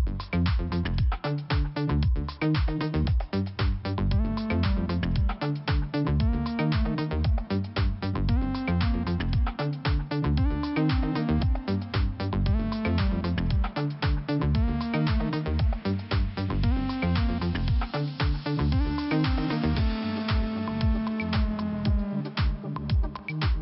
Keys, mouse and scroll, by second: 0.0 click, 0.8 click, 3.8 click, 5.8-6.5 scroll down 1, 6.5 scroll up 1, 7.7 click, 7.8 click, 10.5 click, 13.7 click, 13.8 click, 14.6 click, 15.8 scroll up 1, 16.8 click, 16.9 click, 17.6 click, 19.5 click, 19.6 click, 22.1 click, 22.3 click, 23.1 scroll down 1.